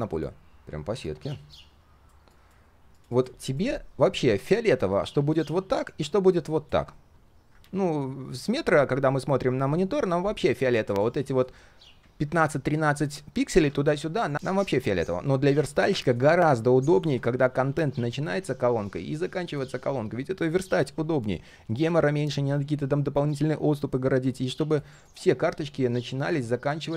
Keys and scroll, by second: 7.5 ctrl+z, 9.0 ctrl+shift+4, 15.1 ctrl+shift+4.